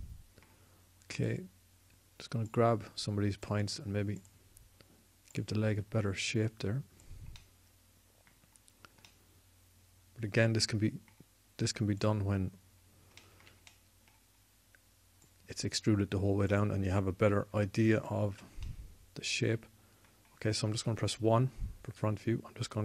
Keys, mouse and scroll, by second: 1.9-3.6 drag, 3.8-5.1 drag, 12.7-14.4 drag, 16.0 click, 21.5 KP_1.